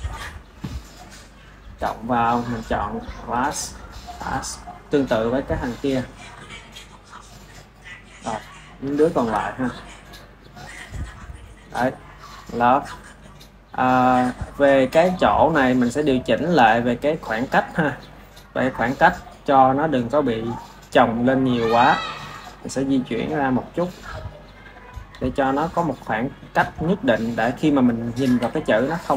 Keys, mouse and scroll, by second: 1.4-2.3 drag, 3.9-4.5 drag, 5.7-9.7 drag, 11.0 click, 12.1-16.8 ctrl+middle drag, 16.8 drag, 19.2 click, 19.9 click, 20.9 click, 22.2 click, 23.0 click, 24.1 click, 24.8 click, 25.7 click, 26.0 click, 27.4 click, 28.3 r.